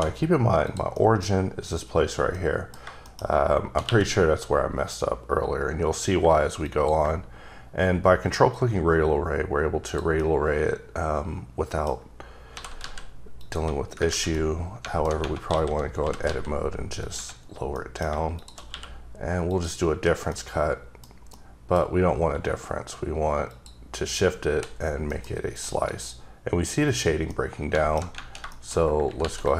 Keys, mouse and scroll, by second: 0.6 click, 0.9 middle click, 2.3 middle click, 3.0 shift+middle click, 3.8 q, 6.6 q, 6.6 click, 8.5-9.6 scroll up 2, 9.9 click, 10.2 middle click, 11.9-12.5 scroll up 3, 12.5 g, 12.8 z, 13.4 click, 13.8 scroll down 2, 14.1 ctrl+z, 14.3 middle click, 15.5 a, 16.0 g, 16.2 z, 17.0 click, 17.7 middle click, 18.3 shift+click, 18.7 q, 19.5 click, 19.9-20.2 scroll down 2, 20.3 middle click, 21.3 middle click, 21.8 scroll up 2, 22.2 q, 23.5 click, 23.9 click, 24.5 h, 24.7 scroll down 1, 25.0 scroll up 1, 25.1 middle click, 25.5 click, 27.3 middle click, 28.5 shift+middle click, 28.6 shift+scroll down 2, 29.2 ctrl+r, 29.4 ctrl+click.